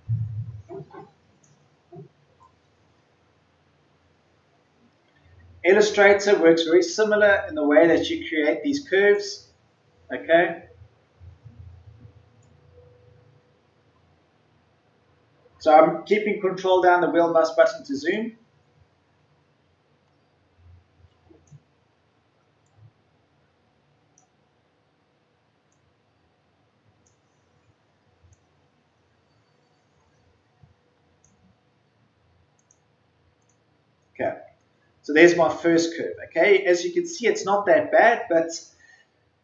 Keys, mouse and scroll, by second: 13.9-14.3 ctrl+scroll down 1, 15.2 ctrl+scroll up 1, 18.1-31.9 drag, 33.3 right click, 36.7-37.3 ctrl+scroll up 1.